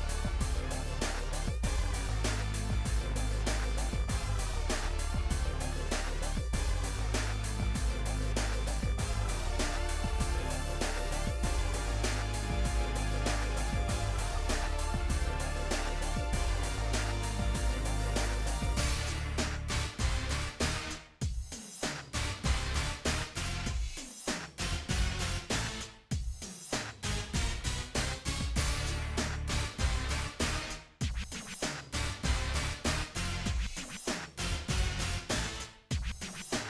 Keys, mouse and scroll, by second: 0.1 shift+middle click, 0.3 scroll down 1, 0.4 shift+middle click, 1.2 scroll up 2, 1.3 shift+middle click, 1.5 g, 2.7-3.0 scroll down 6, 3.0-4.6 shift+middle drag, 4.6 shift+d, 6.2 shift+d, 7.4 scroll down 1, 7.5 shift+middle click, 8.2 scroll up 4, 8.4 middle click, 8.7-9.1 scroll down 2, 9.1 l, 9.4 middle click, 9.8-10.3 scroll down 1, 10.3 shift+d, 12.0 ., 12.8 r, 13.5 middle click, 14.5 scroll down 1, 16.5 click, 17.2 shift+click, 17.3 middle click, 17.5 shift+click, 17.6 shift+middle click, 18.8 shift+d, 19.9 Delete, 20.3 click, 20.7 g, 22.3 ctrl+z, 22.4 ctrl+z, 22.5 middle click, 22.7 ctrl+z, 23.3 shift+click, 24.0 p, 24.9 g, 25.6 Tab, 25.7 click, 26.2 g, 27.5 Tab, 27.9 3, 27.9 click, 28.2 Delete, 29.0 KP_1, 29.3-29.8 scroll up 1, 30.1 g, 30.3 z, 31.6 a, 32.1 n, 32.6 g, 33.6 shift+d, 35.7 shift+d.